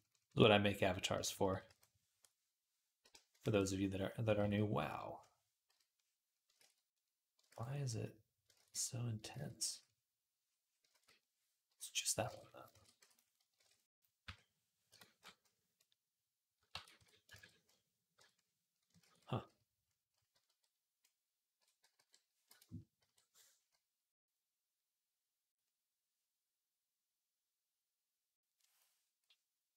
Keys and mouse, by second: 1.0 ], 1.1 ], 1.3 ], 1.5 ], 4.2 ctrl+z, 5.5 |, 6.4 ctrl+z, 7.3 ctrl+z, 8.4 ctrl+z, 9.1 ctrl+z, 9.5 d, 10.8 ctrl+z, 11.5 i, 12.1 ctrl+Tab, 12.6 ctrl+a, 13.4 ctrl+Tab, 14.1 i, 14.7 Escape, 16.5 ctrl+a, 17.3 ctrl+Tab, 18.0 i, 18.8 ctrl+z, 20.3 t, 21.4 b, 22.8 n.